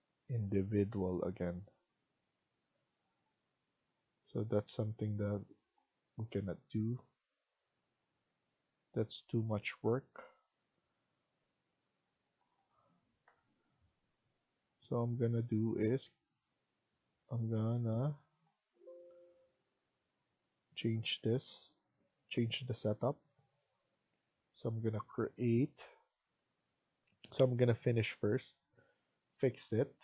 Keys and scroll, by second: 0.8 Delete, 3.0 Delete, 11.3 Escape, 11.7 Escape, 12.2 Tab, 13.2 Delete, 17.0 Escape, 17.6 Escape, 25.2 Escape, 26.4 Escape, 28.0 Escape.